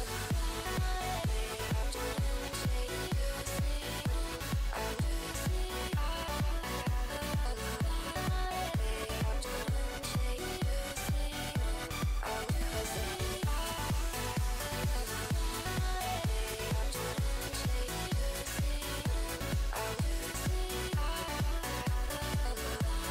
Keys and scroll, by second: 9.4 s, 22.6 s.